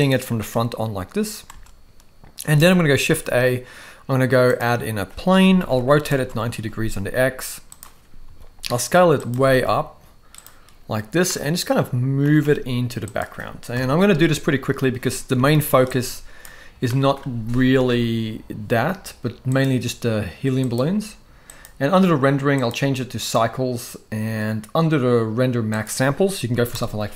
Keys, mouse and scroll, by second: 1.5 space, 2.5 space, 2.9 shift+a, 5.3 r, 7.1 g, 8.3 s, 9.3 s, 11.3 middle click, 11.3 scroll up 1, 12.2 g, 13.7 KP_0, 15.5 ctrl+b, 16.8-17.1 shift+middle drag, 17.8 ctrl+s, 20.7-21.7 drag, 22.5-23.3 drag, 25.8 click.